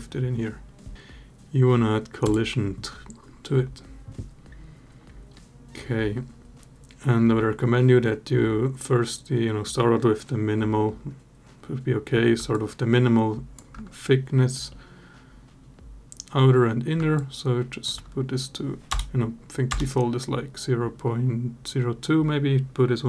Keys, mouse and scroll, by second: 2.0 click, 12.4 shift+click, 16.9 shift+click, 18.7 BackSpace, 19.5 BackSpace.